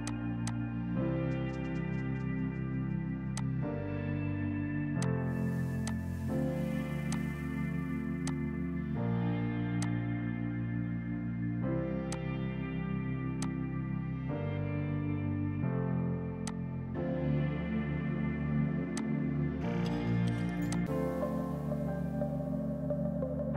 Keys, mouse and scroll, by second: 0.3 F2, 0.4 click, 0.6 right click, 2.7 space, 3.4 click, 16.4 click, 19.5 space, 20.2 F3, 20.6 F2, 20.7 click, 21.0 right click, 21.7 Escape.